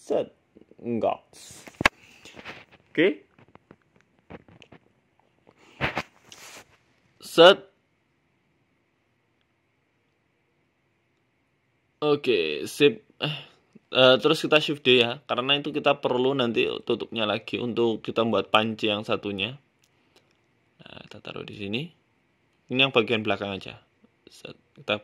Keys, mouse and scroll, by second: 1.3 Tab, 1.5-2.6 scroll down 7, 2.1 middle click, 2.7 s, 3.6 KP_1, 4.2 shift+middle click, 4.5 g, 6.0 scroll down 2, 6.0-6.4 scroll up 5, 6.4 scroll down 1, 7.0 s, 8.9 middle click, 9.7-10.4 scroll down 7, 10.0 middle click, 10.5 shift+middle click, 11.5 right click, 12.1 right click, 12.8 shift+d, 13.5 right click, 13.8 shift+right click, 14.2 KP_1, 14.7 shift+middle click, 15.3 g, 15.5 z, 16.7 scroll down 3, 17.1 right click, 17.5 click, 18.2 shift+middle click, 18.5 g, 19.4 shift+middle click, 19.8 g, 21.8 middle click, 22.1 scroll up 1, 22.3 scroll down 1, 22.5 shift+middle click, 23.0 middle click, 23.6 g, 24.8 middle click.